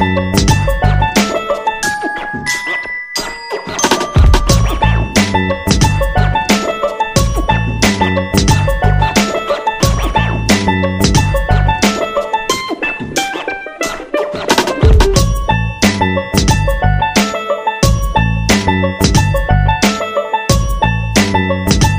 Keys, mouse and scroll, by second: 0.7 BackSpace, 1.8 typing, 2.8 BackSpace, 4.6-5.1 typing, 9.4 click, 12.5 typing, 13.0 Return, 14.4 click, 18.9 click.